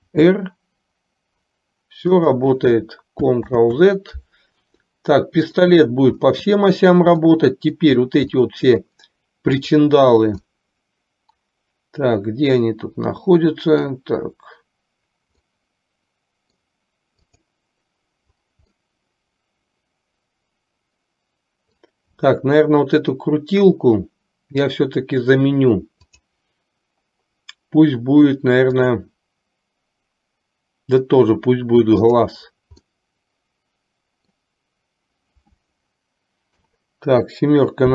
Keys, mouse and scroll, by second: 0.3 r, 3.6 ctrl+z, 5.0-5.8 middle drag, 7.3-8.0 middle drag, 8.6-9.1 middle drag, 9.6 click, 10.6-14.1 middle drag, 15.7-16.7 middle drag, 19.1-22.1 middle drag, 26.2 click, 28.7-31.3 drag, 32.2-32.6 drag, 33.0-34.5 middle drag, 36.6 KP_7.